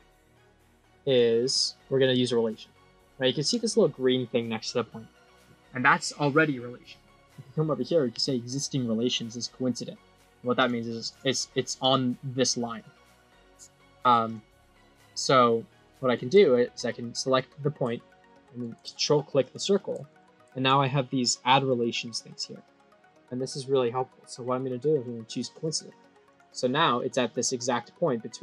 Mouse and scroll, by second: 0.4-1.0 drag, 1.4 middle click, 2.3 click, 3.0 click, 10.5 click, 11.7 click, 12.7 click, 14.2 click, 14.8-16.0 drag, 19.3 click, 25.6 click, 26.2 click, 26.9-27.8 scroll down 9.